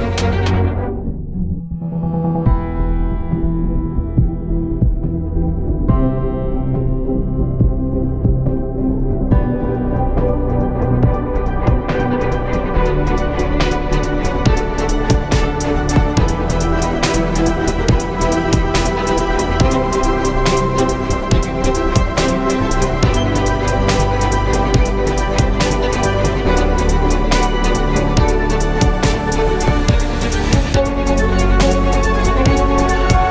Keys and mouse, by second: 0.0 Tab, 2.2 KP_3, 2.8 z, 3.8 shift+a, 4.6 s, 5.7 s, 6.8 s, 7.7 s, 9.7 s, 10.7 s, 14.1 s, 16.2 Tab, 16.8 s, 19.9 Tab, 20.6 r, 24.0 z, 31.2 Tab, 31.4 a, 32.0 Tab.